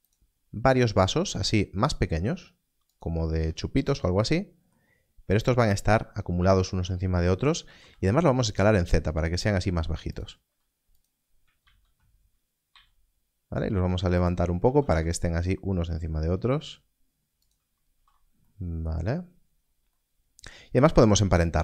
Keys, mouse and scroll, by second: 0.0 shift+d, 0.6-1.3 scroll up 1, 2.9 click, 4.3 s, 4.8 scroll down 1, 5.1 scroll up 1, 5.7 scroll down 1, 5.9-6.6 scroll up 1, 10.1 click, 10.4 s, 11.6 shift+d, 14.2 click, 14.6 shift+d, 14.8 z, 17.4 click, 17.9 alt+a, 19.0-19.9 scroll down 1, 20.7-21.1 scroll up 1.